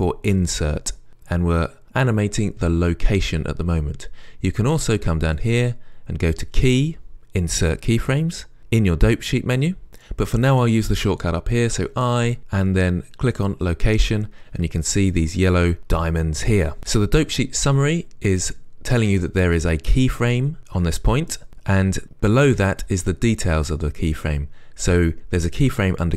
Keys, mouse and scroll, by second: 9.9-18.3 right drag, 13.5 i, 18.3-26.1 drag.